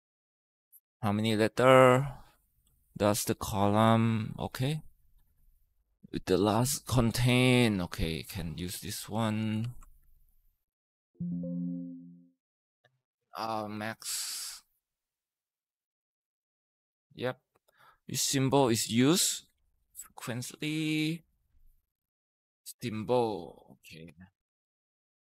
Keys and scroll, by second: 9.4 ctrl+c, 9.8 Escape, 11.6 Escape, 12.8-16.2 typing, 15.1 ctrl+v, 21.1-21.8 typing.